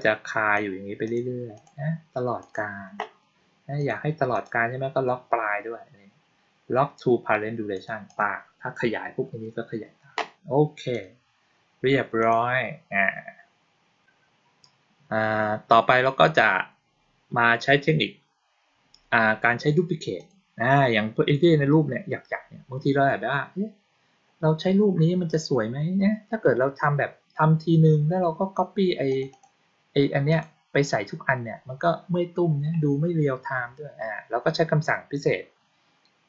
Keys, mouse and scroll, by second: 0.9 click, 1.4 click, 2.3 click, 3.6 click, 4.2 click, 7.6 click, 7.9 click, 10.8 click, 12.1 click, 20.0 click, 29.0 click, 29.2 click, 30.2 click.